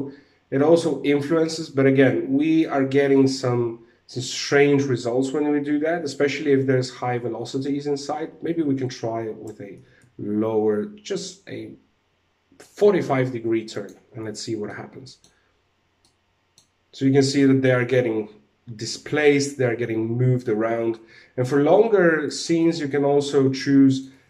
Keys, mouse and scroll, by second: 0.4 middle click, 1.6 middle click, 2.7 middle click, 3.9 middle click, 5.3 alt+a, 7.2 ctrl+z, 8.0 ctrl+z, 9.0 r, 13.2 click, 13.7 alt+a, 14.2 middle click, 15.6 middle click, 17.2 middle click, 20.5 alt+a, 21.8 click, 22.1 middle click.